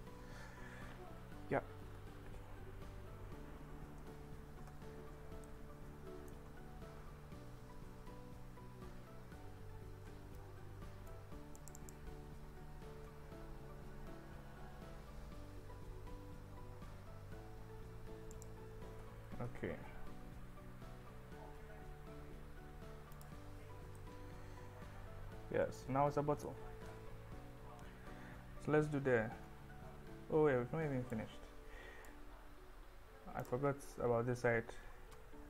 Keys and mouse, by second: 0.7 KP_1, 1.9 ctrl+b, 4.8 Escape, 4.8 `, 5.5 click, 7.7 ctrl+b, 9.3 Escape, 10.4 click, 11.8 click, 12.9 ctrl+b, 18.7 click, 19.0 Tab, 19.4 KP_1, 24.0-26.5 middle drag, 26.8 KP_1, 30.4 Tab, 31.2 click.